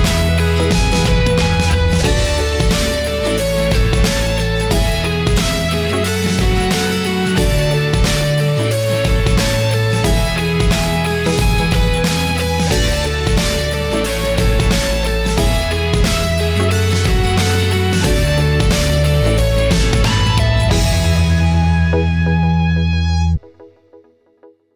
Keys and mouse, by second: 10.1 shift+a, 22.9-24.7 right drag.